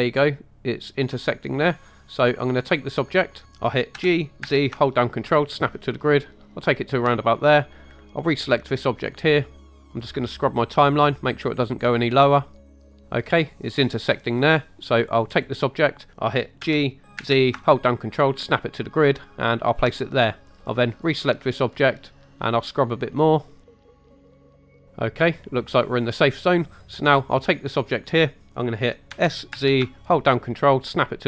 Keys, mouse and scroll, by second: 2.6 click, 3.9 g, 4.5 z, 6.8 ctrl+click, 8.3 click, 10.1 click, 15.3 click, 16.1 ctrl+right click, 16.1 z, 16.6 g, 17.2 z, 19.7 ctrl+click, 20.9 click, 22.6 click, 26.6 click, 29.1 s, 29.6 z.